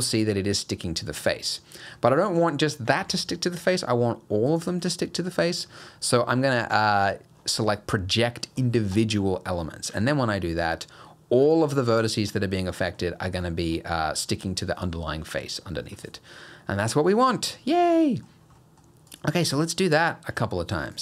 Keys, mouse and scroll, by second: 0.0 middle click, 3.0 ctrl+z, 3.4 middle click, 4.5 click, 9.9 g, 12.3 middle click, 13.4 middle click, 14.2 middle click, 18.0 middle click, 18.3 scroll down 1, 18.6 middle click, 19.1 click, 19.4 g.